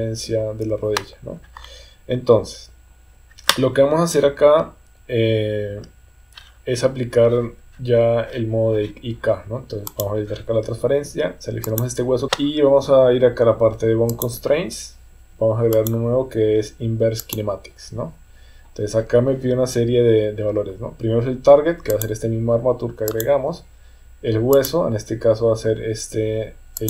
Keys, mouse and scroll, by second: 0.4 KP_3, 10.0 click, 11.6 click, 14.1 click, 15.8-17.4 drag, 21.9-23.3 drag, 24.7-26.8 drag.